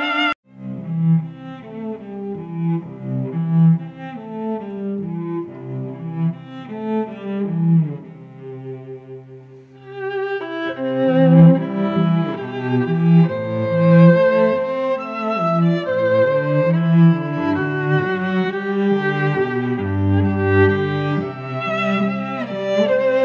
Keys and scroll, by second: 0.0-1.4 typing, 1.9 ctrl+Return, 2.3 ctrl+t, 4.9 Return, 5.3 v, 6.5-10.8 typing, 11.0 ctrl+t, 14.6 ctrl+Return, 15.2 v, 18.7 shift+Up, 18.8 shift+Left, 19.2 shift+Up, 19.5 shift+Left, 20.4 Tab.